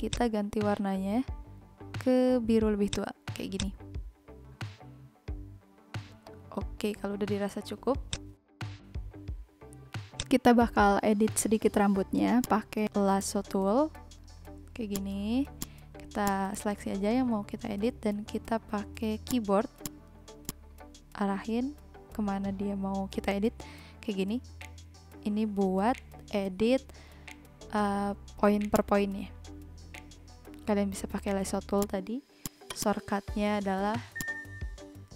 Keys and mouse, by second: 0.0 click, 2.8 click, 8.0 click, 10.1 click, 12.3 click, 12.8 n, 16.7 click, 18.9 v, 19.2 shift+click, 20.5 shift+click, 21.9 a, 23.4 Left, 24.2 Up, 24.6 Down, 25.2 Left, 25.6 Up, 26.0 Left, 26.2 Up, 26.6 Down, 27.2 Left, 27.4 Down, 27.6 Up, 27.8 Left, 28.1 Down, 28.3 Right, 28.7 click, 32.4 click, 34.0 v, 34.1 click.